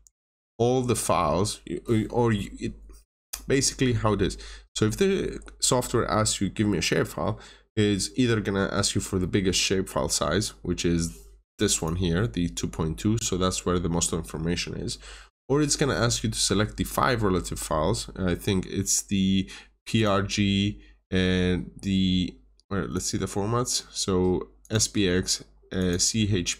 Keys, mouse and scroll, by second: 0.0 Return, 11.7 click.